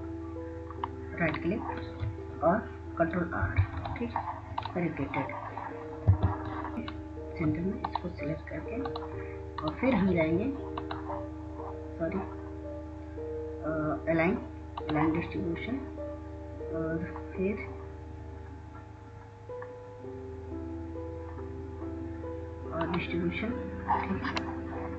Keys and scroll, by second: 4.8 ctrl+r, 5.3 ctrl+r, 6.6 F1, 6.6 F2.